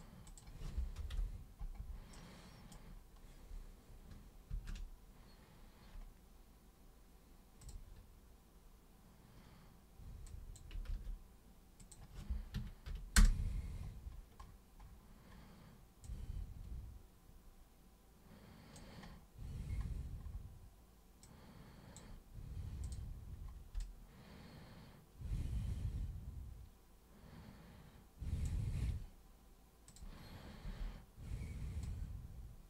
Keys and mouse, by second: 0.3 super+click, 2.2 super+right click, 4.5 ctrl+super+d, 7.6 super+click, 10.3 super+click, 10.9 ctrl+super+z, 11.8 click, 13.2 Return, 16.0-18.8 drag, 21.2 click, 22.8 click, 29.9 click, 30.6 super+e, 31.8 super+click.